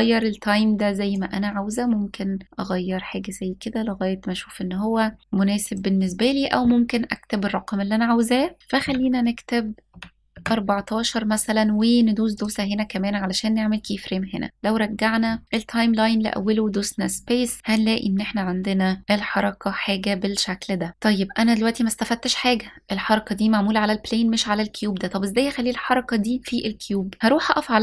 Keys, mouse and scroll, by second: 0.7-5.2 drag, 5.3-10.0 drag, 12.0-14.5 drag, 15.8 space, 20.0 s, 26.3-27.2 scroll up 1, 27.2 click.